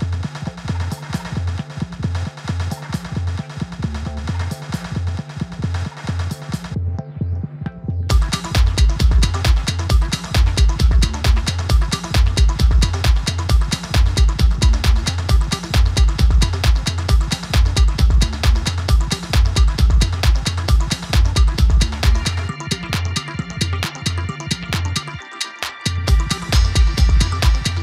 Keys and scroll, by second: 0.2-1.6 typing, 2.8 typing, 4.0 typing, 13.3 typing, 18.1 typing, 19.6 typing, 21.2 typing, 27.2 typing.